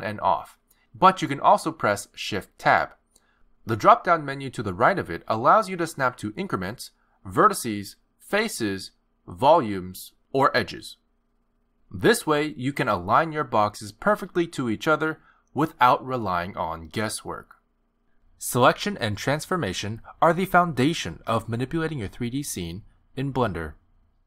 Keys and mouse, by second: 0.2 click, 0.6 click, 2.8 shift+Tab, 3.4 shift+Tab, 4.5 click, 14.4 g, 20.8 middle click, 22.5 click, 23.2 click.